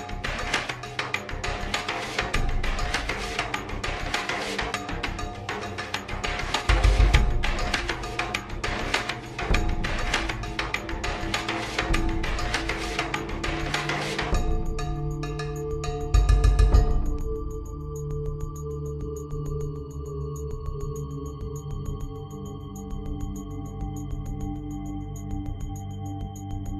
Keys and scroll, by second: 1.2-2.0 typing, 4.7 typing, 4.8 ctrl+z, 24.8-25.6 typing.